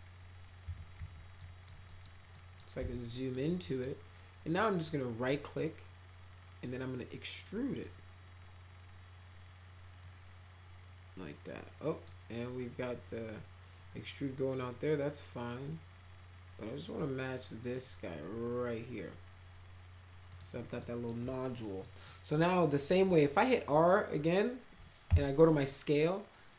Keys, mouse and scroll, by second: 0.6 f, 0.9 x, 1.4 middle click, 1.8 middle click, 2.3 middle click, 2.7 z, 3.1 middle click, 3.6 middle click, 4.5 right click, 7.7 click, 10.0-12.0 drag, 15.0-17.7 drag, 20.3 click, 20.7 middle click, 21.8 middle click, 25.0 r.